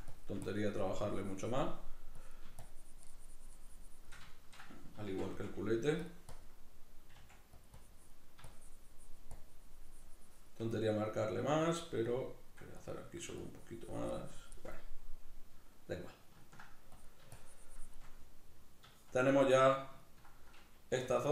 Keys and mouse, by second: 4.3 shift+middle click, 5.1 shift+c, 6.1 click, 7.2 click, 7.2 f, 8.5-10.8 shift+drag, 10.8 middle click, 11.5 f, 11.8 click, 13.4-14.8 shift+drag, 14.8-16.9 middle drag, 16.9-18.0 drag, 18.0-20.0 middle drag, 21.0 f, 21.2 click.